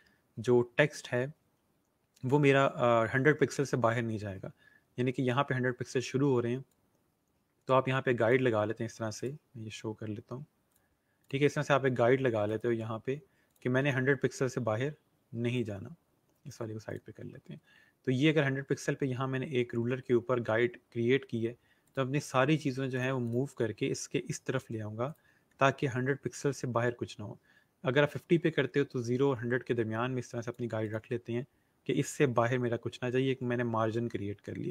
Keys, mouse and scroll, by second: 6.6 click, 9.0 right click, 10.5 click, 12.3 right click, 13.4 click, 15.4 click, 21.7 click, 25.0 click, 28.0 click.